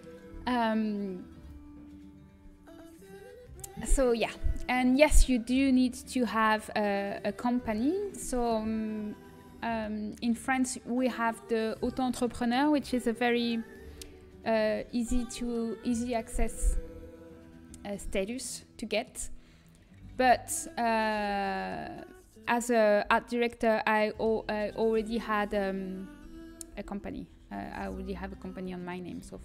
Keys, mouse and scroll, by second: 3.7-6.9 middle drag, 9.8-14.4 middle drag, 14.6 middle click, 16.9 a, 20.3 a, 22.9 l, 25.0 l, 26.5-28.4 typing.